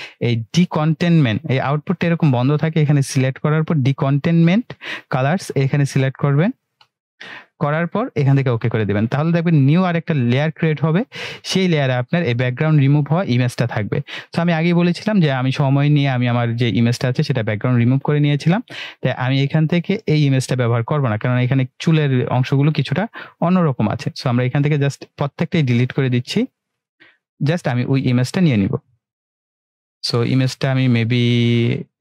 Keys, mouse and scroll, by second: 1.6 click, 6.5 click, 14.9 click, 17.8-18.7 drag, 19.4-21.3 click, 23.9 Delete, 24.7 click, 25.2 Delete, 26.8 click, 27.1 Delete, 27.9-29.8 drag.